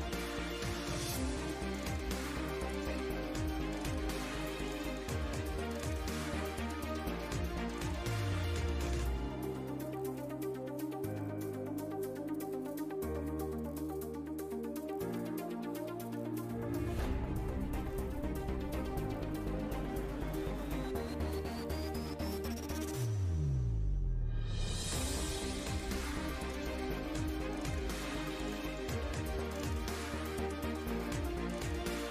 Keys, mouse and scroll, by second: 2.4 shift+a, 3.1 ctrl+alt+KP_0, 5.3 KP_0, 6.0 KP_0, 7.5 KP_0, 8.1 KP_0, 9.1 Home, 9.5 shift+f, 17.0 shift+a, 17.8 shift+s, 18.3 shift+a, 19.8 z, 21.0 click, 25.1 middle drag, 25.4 Home, 25.9 shift+z, 26.6 shift+z, 26.7 KP_0, 28.0 click, 28.6 click, 29.2 KP_0, 30.4 middle click, 31.2 KP_0, 31.6 KP_0, 32.0 shift+z.